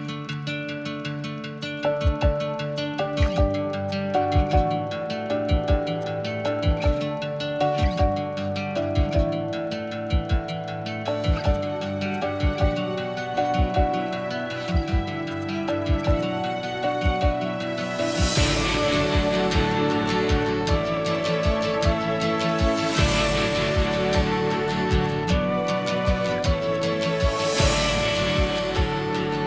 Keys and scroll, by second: 19.8 Escape, 20.6 Escape, 21.4 Escape, 21.5 Escape, 21.6 Escape, 26.0 b.